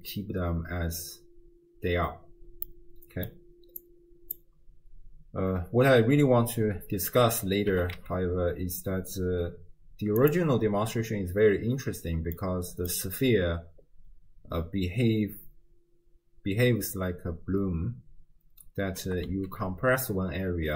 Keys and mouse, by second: 2.7 middle click, 3.9-4.4 drag, 7.8 g, 12.4 middle click, 19.1 g.